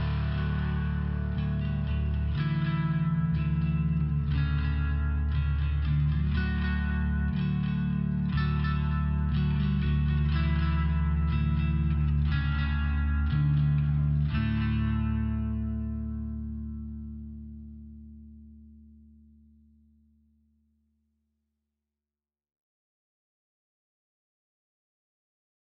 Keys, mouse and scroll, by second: 0.1 click, 2.5 click, 3.2 click, 5.3 click, 7.3 click, 8.5 click, 9.6 click, 10.5 click, 11.7 click, 15.6 click, 17.7 click, 19.6 click, 20.4 click, 20.9 click, 22.8 click.